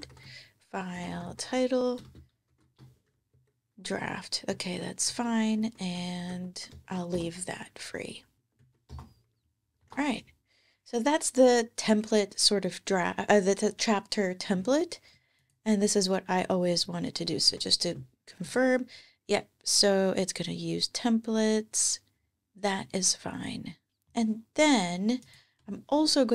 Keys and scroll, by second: 0.0-2.9 typing, 3.1 Page_Down, 4.3 Page_Down, 5.4 alt+Left, 6.5 shift+super+Right, 8.3 Down, 8.4 super+Right, 8.7 super+BackSpace, 9.6 alt+super+s, 17.3 super+,, 25.4 Escape.